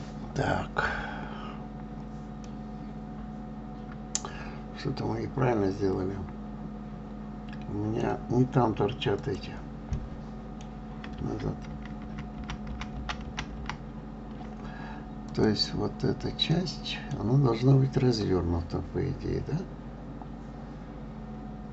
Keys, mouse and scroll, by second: 2.9-5.9 middle drag, 9.6 click, 10.3-12.1 middle drag, 12.1 ctrl+z, 12.4-14.0 ctrl+z, 15.7 click, 16.9-19.9 middle drag.